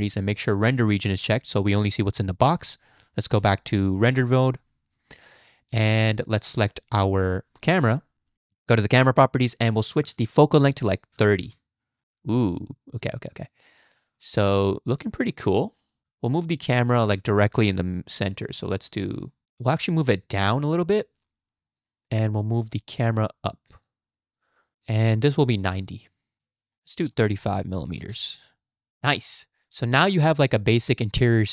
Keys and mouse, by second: 0.6 click, 3.4 z, 9.7-11.5 drag, 16.0 click, 19.8-21.7 shift+drag, 22.7-25.7 shift+drag, 27.1-28.3 drag, 28.9 z, 29.8-30.3 drag, 30.8-31.5 drag.